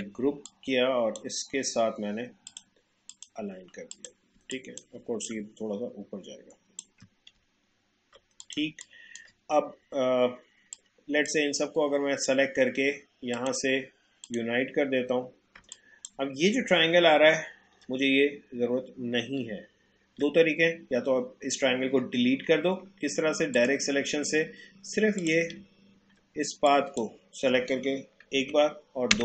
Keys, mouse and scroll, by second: 0.4-2.4 drag, 4.3 space, 4.5 click, 4.8 space, 5.2-7.5 drag, 7.5 alt+scroll down 1, 8.4 click, 8.6 space, 8.8 click, 9.1 space, 10.8-13.4 drag, 15.6 space, 15.8 click, 16.1 space, 17.2 alt+scroll up 1, 19.6 alt+scroll down 1, 23.5 click, 25.7 alt+scroll up 1, 26.6 click, 28.3 Delete.